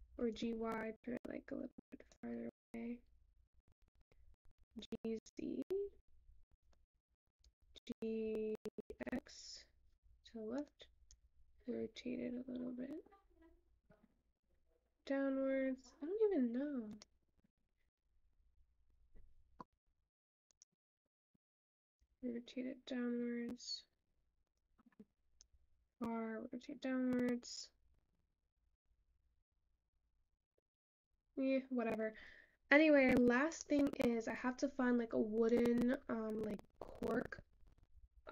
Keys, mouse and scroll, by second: 20.7-31.6 middle drag, 31.6-35.0 scroll up 4.